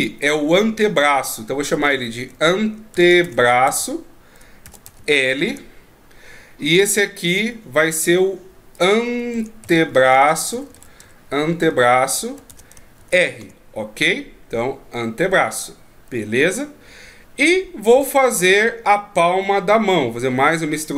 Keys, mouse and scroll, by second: 7.3 right click, 8.7 click, 16.9-17.9 shift+scroll down 6, 17.9 right click, 19.3 e.